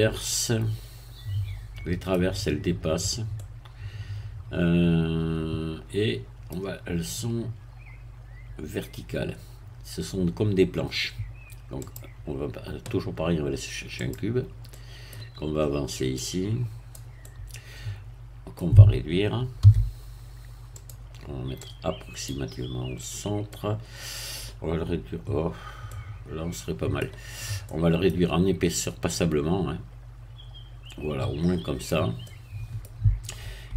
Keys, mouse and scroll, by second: 3.4-9.2 middle drag, 11.8 click, 14.0 click, 14.7 middle click, 16.2-17.2 drag, 17.2-19.2 middle drag, 19.6 s, 20.8 click, 21.6-22.8 drag, 22.9-23.4 scroll up 1, 23.5-24.5 middle drag, 25.4 scroll down 1, 25.9-27.2 middle drag, 27.4 scroll up 1, 27.6 middle click, 29.1-32.0 drag, 32.2-33.4 middle drag.